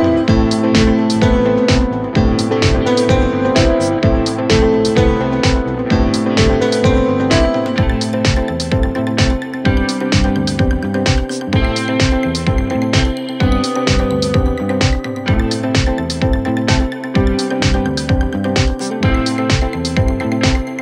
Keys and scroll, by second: 8.6 3, 8.9 ], 9.6 4, 15.4 3.